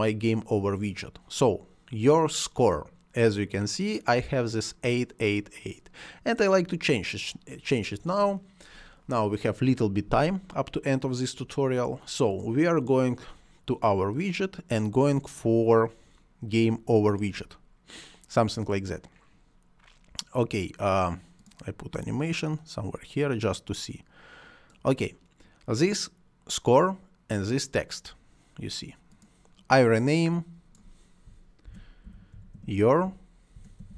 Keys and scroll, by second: 31.3-33.9 typing.